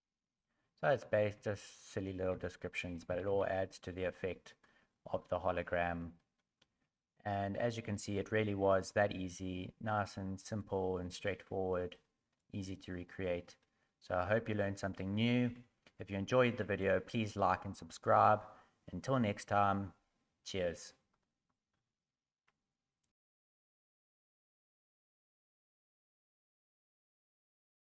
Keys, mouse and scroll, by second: 1.6 Tab, 1.6 scroll down 3, 1.6-3.3 typing, 2.5 scroll down 3, 2.9 middle click, 3.5 middle click, 4.6 middle click, 5.6 scroll up 4, 6.2 shift+middle click, 6.9 middle click, 9.6 middle click, 11.9 middle click, 13.6 middle click.